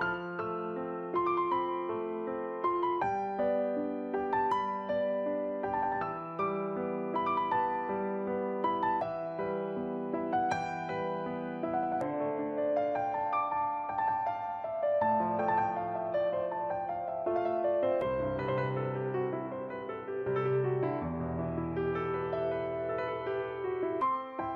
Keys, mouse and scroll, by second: 0.2 click, 1.0 middle click, 3.1-3.9 scroll up 1, 3.9 right click, 3.9-4.2 scroll up 2, 5.4 click, 11.6 middle click, 12.6 right click, 13.3 click, 16.6 middle click, 17.6 right click, 18.2 click, 19.1 right click, 19.6 click, 20.7 right click, 21.1 click, 23.3 middle click.